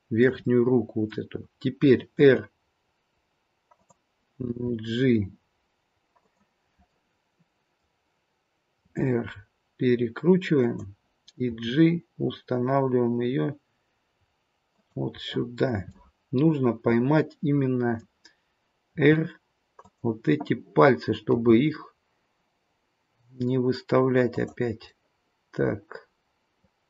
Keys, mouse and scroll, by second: 0.4 middle click, 2.2 r, 4.4 g, 6.9 middle click, 7.8-8.8 scroll down 1, 8.8 r, 11.4 g, 15.1 middle click, 16.0 middle click, 16.0-16.5 scroll up 1, 18.9 r, 21.2 g, 24.8 middle click.